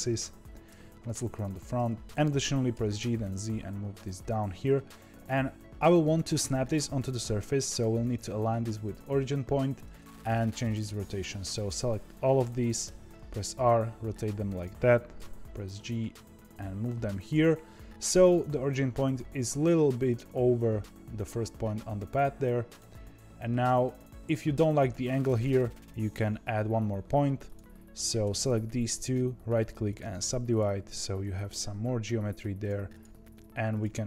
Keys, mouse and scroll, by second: 0.6 KP_1, 1.7 g, 11.1 click, 12.8 r, 15.1 g, 22.6 click, 23.8-24.9 scroll down 3, 24.9 shift+middle click, 25.4-26.8 scroll up 2, 26.8-27.4 scroll up 1, 27.4 click, 28.3 shift+click, 28.9-30.4 right drag, 30.4 click, 31.4 g, 32.9 click, 33.7 click.